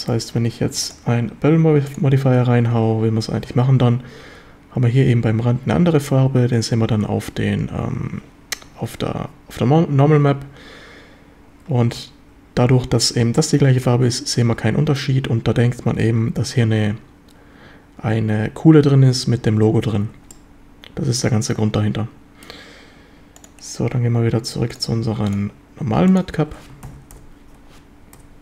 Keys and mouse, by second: 0.9-2.0 drag, 19.3 z, 20.1 z, 20.3-22.2 middle drag, 22.2 drag, 22.2 right click, 23.4 click, 24.7-26.4 drag, 26.9 ctrl+s, 27.2 KP_7, 27.2 KP_4.